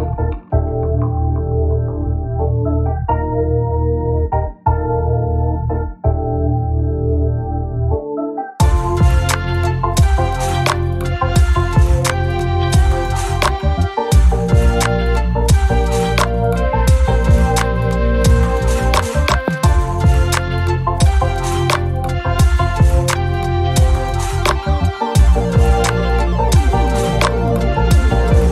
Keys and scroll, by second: 0.9-1.4 typing, 2.6 shift+F6, 5.6 F1, 6.5 shift+F6, 11.9 F1, 12.5-13.3 typing, 19.0-19.9 typing, 20.4 shift+F6, 23.9 F1, 25.4 F1, 25.9 shift+F6.